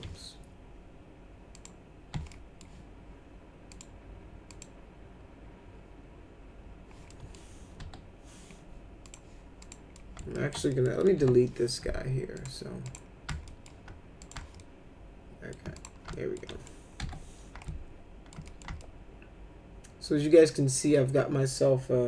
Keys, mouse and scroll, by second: 1.5 click, 2.3 alt+middle click, 3.7 click, 4.5 click, 7.1 middle click, 7.8 F4, 9.0 click, 9.6 click, 9.9 alt+middle click, 10.3 alt+middle click, 10.7 middle click, 11.2 Delete, 12.3 click, 12.8 click, 13.5 alt+middle click, 14.2 click, 14.6-15.5 alt+middle drag, 15.8 click, 16.1 alt+middle click, 16.5 middle click, 17.0 F4, 17.6 alt+middle click, 18.4 middle click, 18.8-22.0 alt+middle drag.